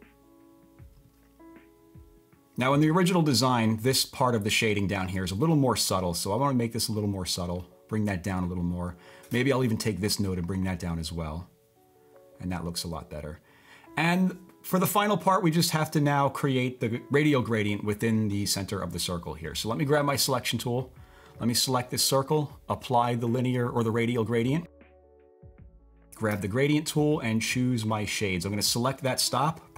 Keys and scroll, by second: 26.3 typing.